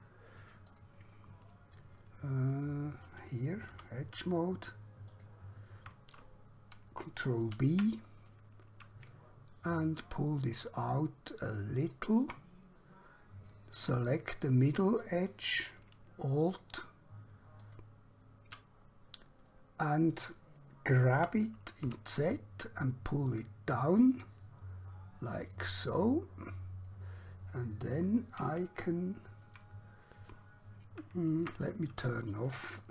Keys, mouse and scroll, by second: 0.0 click, 3.9 2, 5.1 alt+click, 7.5 ctrl+b, 11.9 shift+click, 12.6 scroll up 1, 14.6 click, 16.7 alt+click, 17.7 alt+click, 18.8 scroll down 1, 19.6 middle click, 21.3 g, 22.0 z, 25.5 click, 26.1 middle click, 27.5 scroll up 1, 28.9 shift+middle click, 30.1-30.7 scroll up 1, 30.7 scroll down 1, 31.5 Tab.